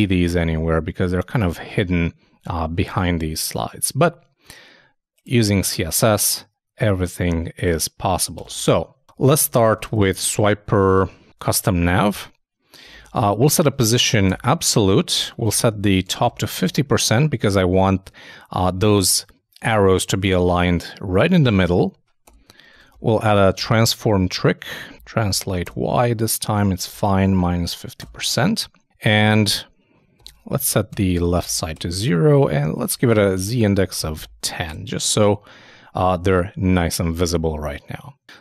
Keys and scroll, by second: 3.9 super+Tab, 15.4-17.1 typing, 27.0 shift+0, 27.5 shift+Right, 30.3-31.2 typing, 34.8 super+BackSpace, 34.9 super+s, 35.1 super+Tab.